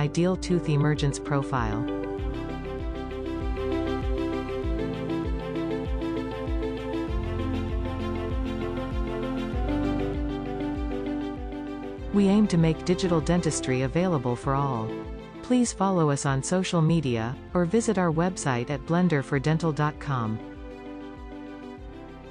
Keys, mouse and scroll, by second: 1.5 Tab, 2.1 scroll down 2, 3.1-5.5 middle drag, 6.0-7.1 drag, 7.1-10.0 middle drag, 10.0 g, 11.0 click, 11.3 g, 11.4 middle click, 12.6 click, 13.2 h, 13.6 click, 13.8 h, 13.9 scroll down 3, 14.2-16.0 middle drag, 16.6-18.5 middle drag, 18.7 ctrl+z, 21.4 shift+middle click, 22.1 click.